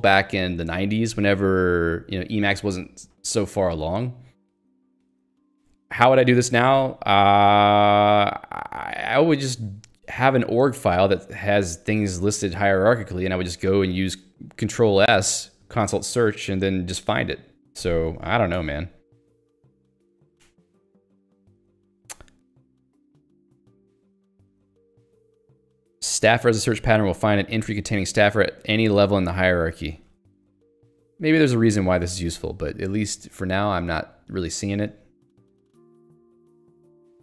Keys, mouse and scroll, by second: 18.5 Escape, 22.1 j, 29.6 k, 34.3 click, 34.5 middle click.